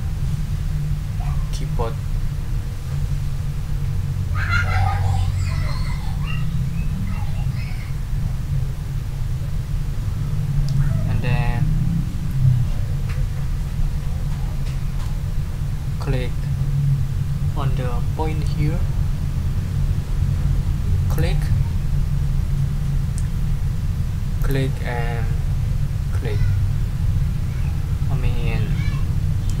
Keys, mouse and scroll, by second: 21.1 ctrl+middle click, 24.4 click.